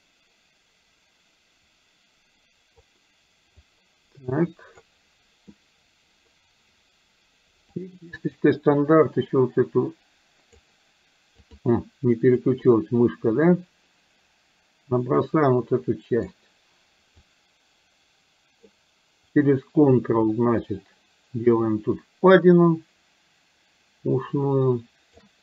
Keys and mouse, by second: 3.7-4.8 drag, 5.5 click, 7.8 click, 8.9-10.7 drag, 12.5-16.4 drag, 17.3-18.8 drag, 20.7-25.3 ctrl+drag.